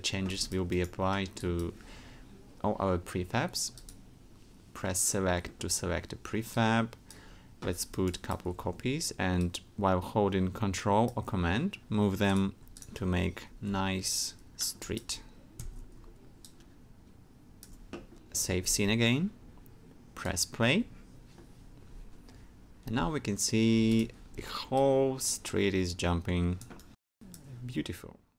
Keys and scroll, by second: 8.4 alt+w, 13.4 super+d, 15.7 alt+super+d, 18.7 super+s.